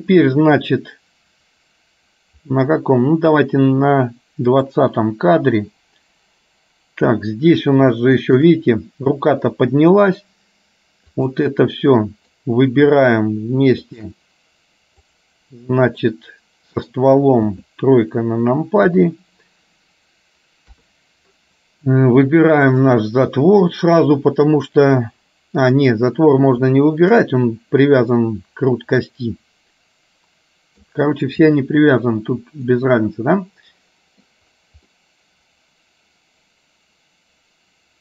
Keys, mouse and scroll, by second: 4.7 click, 8.1 shift+middle click, 11.9 middle click, 13.9 shift+click, 15.2 click, 16.2 middle click, 17.6 KP_3, 29.2-30.9 middle drag, 32.8-34.4 middle drag, 34.9-38.0 middle drag.